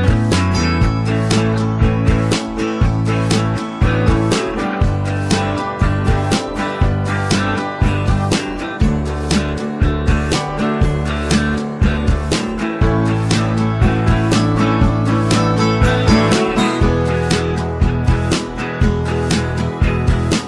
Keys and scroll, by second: 1.7-3.7 typing, 5.7-6.9 typing.